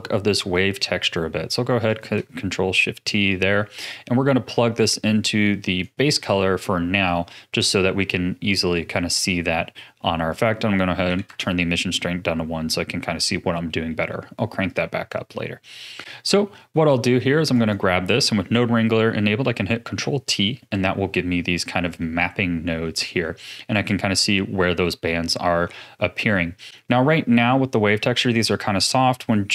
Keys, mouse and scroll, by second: 0.7 middle click, 1.2-1.9 scroll down 4, 1.9 ctrl+shift+click, 2.5-3.0 middle drag, 3.0-3.5 scroll up 5, 3.5-4.4 scroll down 2, 4.4 click, 8.1-8.6 scroll up 2, 8.9-10.3 middle drag, 10.3-12.3 drag, 12.3 scroll up 2, 13.5-14.7 middle drag, 14.7 click, 15.3-15.8 middle drag, 15.8-16.4 scroll up 2, 16.4-17.5 middle drag, 17.5 click, 19.8 ctrl+t, 20.4-23.4 middle drag, 26.7-27.3 scroll up 7.